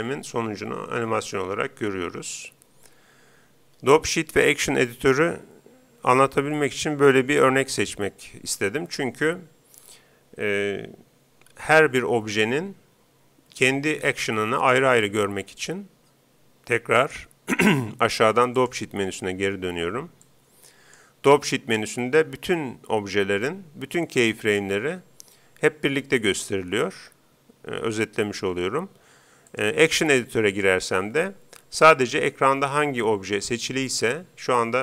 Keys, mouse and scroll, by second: 16.9-18.7 drag, 20.2-22.0 drag, 29.5-31.5 drag, 33.5-34.8 right drag.